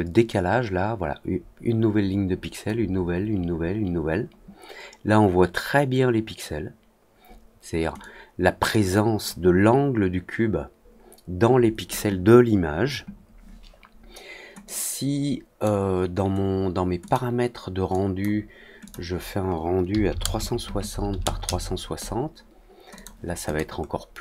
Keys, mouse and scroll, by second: 7.9-9.2 drag, 14.6-15.6 drag, 17.0 click, 17.8-18.1 drag, 18.8 click, 22.9 click, 23.4 click, 23.7 middle click, 24.1 middle click.